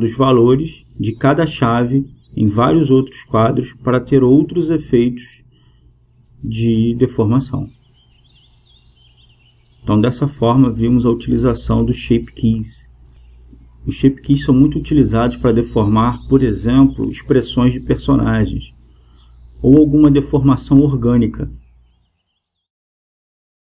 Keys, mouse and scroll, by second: 2.1-6.1 drag, 7.2-13.1 drag, 14.0-16.8 drag.